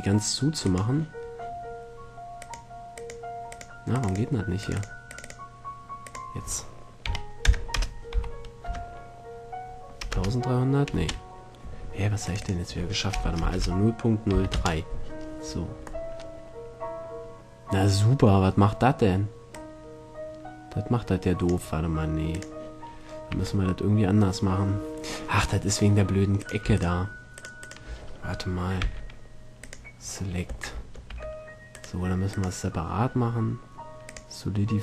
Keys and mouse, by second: 2.6-7.3 drag, 12.4-14.4 drag, 13.6 BackSpace, 13.8 BackSpace, 15.4 middle click, 15.8 middle click, 16.2 middle drag, 19.7-21.7 drag, 22.6 click, 23.5 Tab, 26.6-29.1 right drag, 29.0 p, 31.3 Tab, 32.0 click, 32.5-33.1 middle drag.